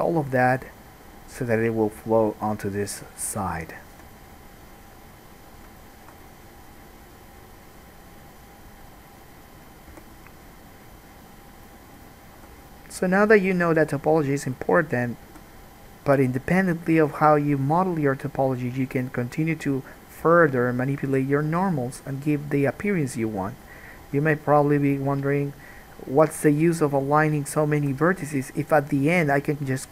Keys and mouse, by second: 3.8 shift+click, 4.2-9.4 middle drag, 9.4-13.6 drag, 10.1 g, 12.6 g, 13.6 middle click, 13.9-15.1 drag, 13.9 g, 15.1 middle click, 15.4-16.9 drag, 15.4 g, 16.9 middle click, 17.2-29.9 drag, 17.2 g, 20.0 middle click, 20.0 right click, 20.4 g, 21.6 middle click, 21.6 right click, 21.8 g, 23.7 middle click, 23.7 right click, 24.2 g, 25.9 middle click, 25.9 right click, 26.3 g, 27.7 middle click, 27.7 right click, 28.0 g, 29.1 middle click, 29.1 right click, 29.5 g.